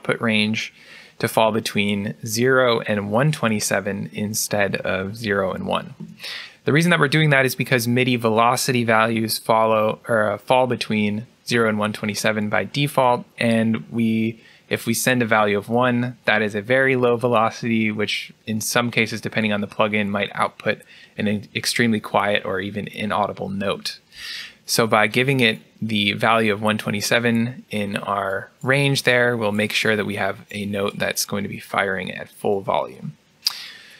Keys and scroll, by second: 5.6-6.3 typing.